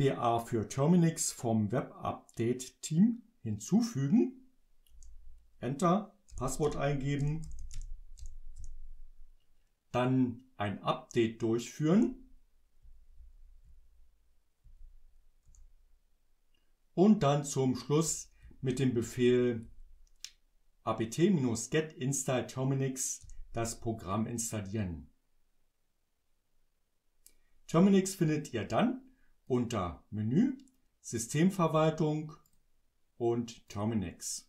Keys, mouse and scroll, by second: 4.9 Return, 6.1-8.7 typing, 11.9 Return, 12.9 Up, 14.7 Up, 15.5 Return, 18.1 Up, 29.5 click, 32.5 click, 33.7 click.